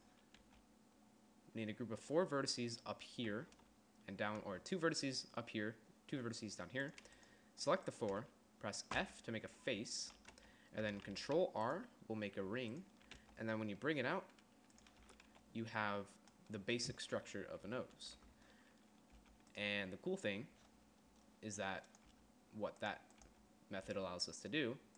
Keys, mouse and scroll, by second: 1.0 g, 9.5 f, 11.6 ctrl+r, 13.7 g, 15.6 Tab, 15.8 z, 18.1 KP_1, 18.7 Tab, 19.6 g, 22.6 g, 24.4 g.